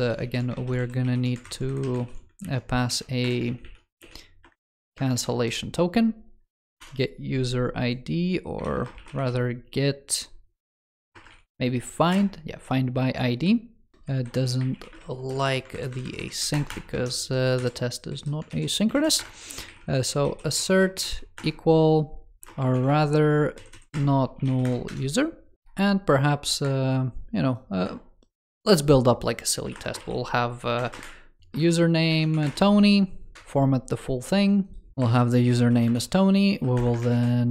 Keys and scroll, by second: 0.0 super+c, 0.4 ctrl+s, 0.6 super+c, 0.9 super+e, 1.3 super+Right, 1.7 super+Left, 2.2 super+z, 2.7 super+v, 3.3 super+z, 5.0 super+v, 8.4 ctrl+s, 10.6 alt+BackSpace, 14.1 super+Left, 15.6 alt+Right, 18.4 super+s, 18.8 super+Right.